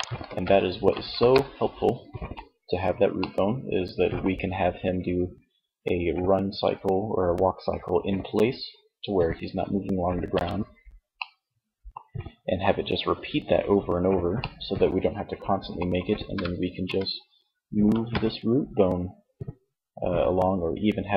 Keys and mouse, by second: 0.2 KP_3, 10.2-11.2 middle drag, 12.0 middle click, 13.3-14.7 middle drag, 15.5 g, 20.9-21.1 drag.